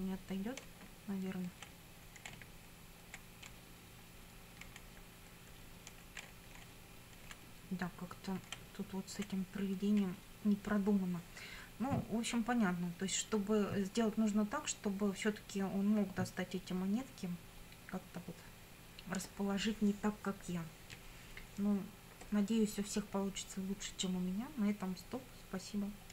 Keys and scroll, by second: 0.7 Down, 2.4 Right, 3.5 Down, 4.7 Left, 6.3 Down, 6.6 Left, 7.2 Down, 8.7 Left.